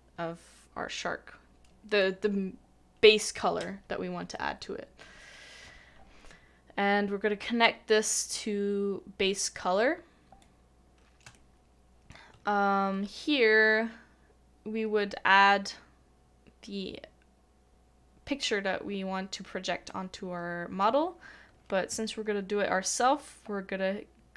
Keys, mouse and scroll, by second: 11.3 shift+middle click.